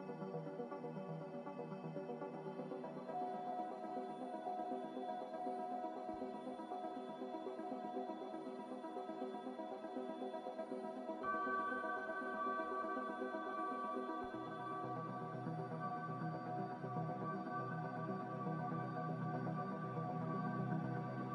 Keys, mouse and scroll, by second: 5.6 g, 10.2 m, 20.4-21.3 typing.